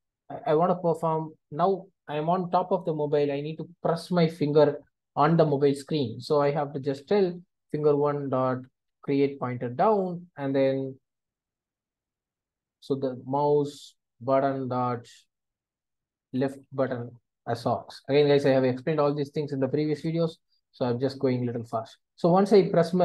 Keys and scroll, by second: 0.5 Return, 8.0 Return, 14.3 Return, 16.9 Return, 21.6 Return.